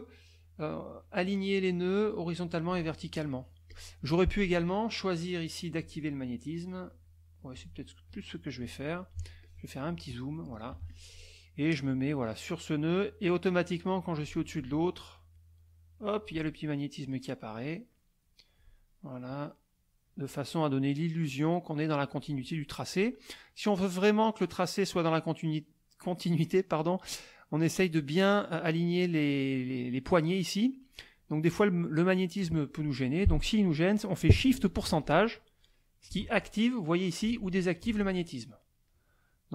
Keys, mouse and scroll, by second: 2.0 click, 2.6 click, 3.7 click, 5.7 click, 6.7 click, 7.5 click, 8.1 click, 9.1 z, 9.4 click, 10.2 middle click, 10.7 F2, 11.8-14.4 drag, 15.3-16.4 drag, 16.9 click, 19.3 click, 21.2 click, 22.4 click, 27.0-28.1 drag, 38.9 middle click.